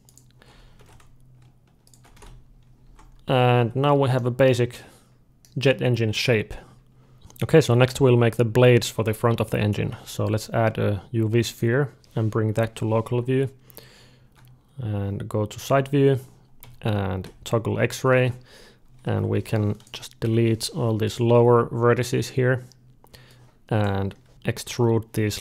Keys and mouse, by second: 0.6 ctrl+b, 2.0 alt+a, 2.2-6.0 middle drag, 2.7 Tab, 3.4 d, 7.1 ctrl+z, 7.1-8.7 drag, 8.7 middle click, 9.9 shift+a, 12.3 KP_Divide, 13.8 d, 15.3 Tab, 16.4 z, 18.0 alt+a, 19.0 1, 19.2-21.2 drag, 20.1 Delete, 23.1-24.8 drag, 24.3 ctrl+z, 24.3 alt+a, 24.6 e.